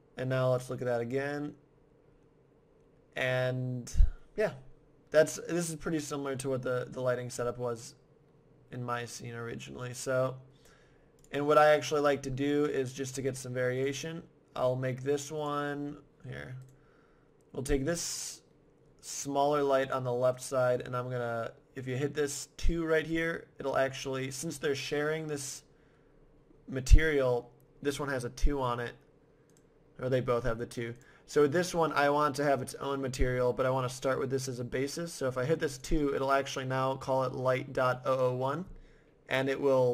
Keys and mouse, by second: 6.7 middle click, 8.4 middle click, 11.2-12.6 drag, 12.6 middle click, 14.5 right click, 16.6 right click, 17.1-18.3 right drag, 29.5-32.7 right drag, 35.7-37.5 right drag, 37.5 click.